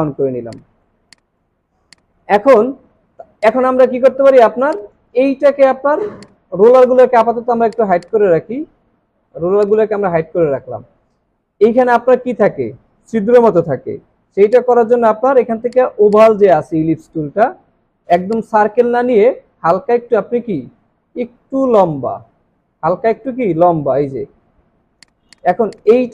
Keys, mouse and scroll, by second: 0.0 alt+scroll down 1, 0.4 space, 0.9 space, 1.6 alt+scroll down 1, 4.5 space, 6.2 right click, 14.5 right click, 15.9 space, 16.9 alt+scroll up 2, 23.5-24.2 alt+scroll up 2.